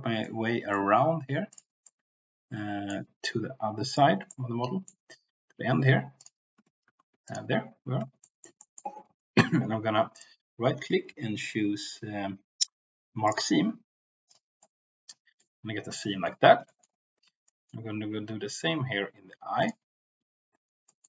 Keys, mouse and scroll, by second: 0.2 middle click, 1.5 ctrl+click, 1.8-3.0 middle drag, 4.3 shift+middle click, 6.9 ctrl+z, 8.3 shift+middle click, 8.6 middle click, 10.1-13.2 right drag, 14.5 middle click, 16.2 shift+middle click, 16.7 shift+middle click, 17.6 shift+middle click, 20.9 middle click.